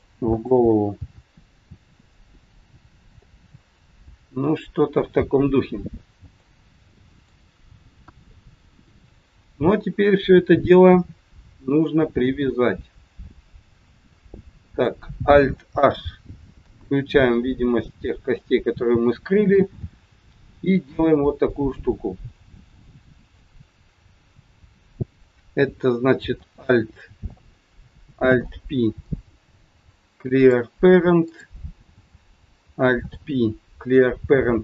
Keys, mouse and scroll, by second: 0.2 click, 0.9 g, 2.4 middle click, 6.3 middle click, 8.0 KP_1, 9.7-10.1 scroll up 1, 11.9 middle click, 14.2 shift+middle click, 16.5 alt+h, 17.4 middle click, 19.3-19.6 scroll up 2, 19.7 middle click, 24.6 click, 28.2 alt+p, 31.2 click, 33.0 alt+p.